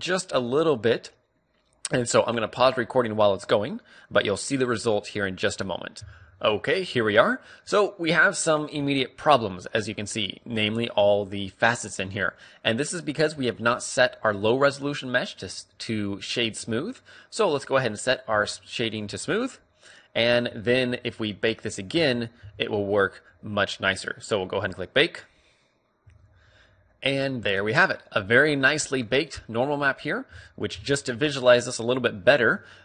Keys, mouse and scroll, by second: 17.0 t, 19.6-21.3 drag, 20.9 t, 22.4 z, 22.9 z, 30.8 middle click.